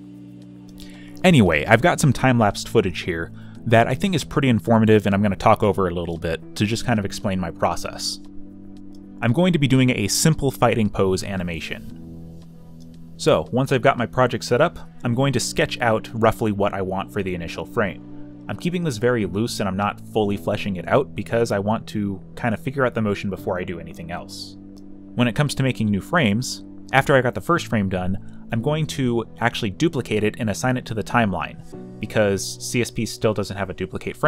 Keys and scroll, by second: 1.8 Return, 3.4-4.5 typing, 6.3-7.2 typing, 13.7 a, 14.3 b, 15.4 z, 17.3 z, 19.0 b, 27.7 b, 28.2 alt+f, 28.5 ctrl+t, 32.3 v, 33.2 space.